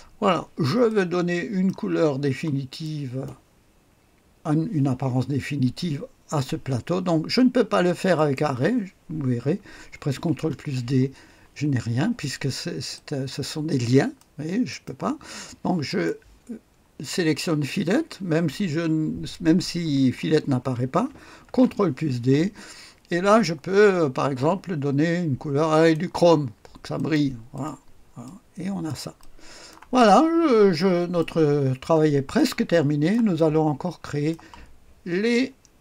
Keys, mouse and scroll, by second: 0.1-0.9 scroll down 1, 0.9 click, 2.3-2.8 scroll down 1, 2.8 right click, 3.6 right click, 8.1 click, 10.2 ctrl+d, 14.2 click, 14.7 click, 15.9 click, 21.5 ctrl+d, 23.3 click, 25.7 click, 26.9-30.1 drag, 30.1-31.2 scroll up 1, 31.2 right click, 31.7-32.4 scroll down 1, 32.4-34.6 drag.